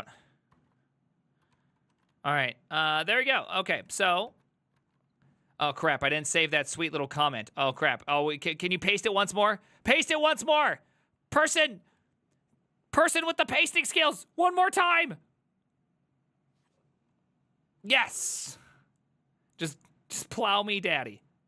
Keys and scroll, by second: 0.6 alt+{, 1.6 ctrl+c, 1.7 ctrl+c, 1.8 ctrl+c, 2.0 ctrl+a, 2.2 1, 3.2 ctrl+c, 3.3-4.1 typing, 4.3 ctrl+c, 4.9 alt++.